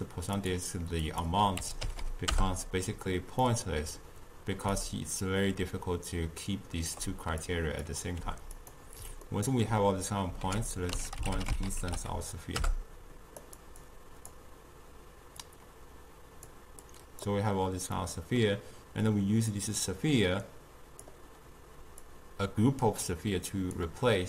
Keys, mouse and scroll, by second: 1.1 click, 2.0 0, 3.5-4.8 middle drag, 4.8-8.2 shift+drag, 8.2 g, 9.3-10.5 ctrl+middle drag, 10.5 ctrl+a, 13.8-15.5 drag, 16.9 click, 18.0-19.6 middle drag, 19.6 click, 20.3 click, 22.1 drag.